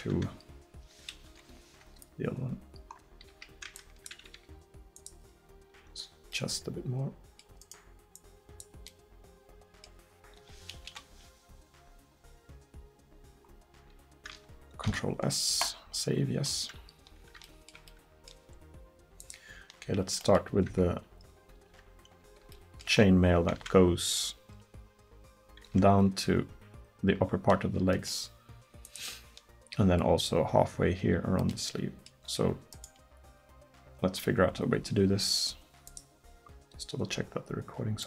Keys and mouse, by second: 0.5 middle click, 1.3 KP_1, 3.3 a, 4.4 g, 5.4 right click, 8.2-10.0 middle drag, 10.9 KP_1, 14.5-16.0 middle drag, 14.9 ctrl+s, 17.9 click, 20.7 Tab, 21.5 Tab, 28.9-31.6 middle drag, 31.8-32.8 middle drag, 35.4-37.4 middle drag, 37.4 click.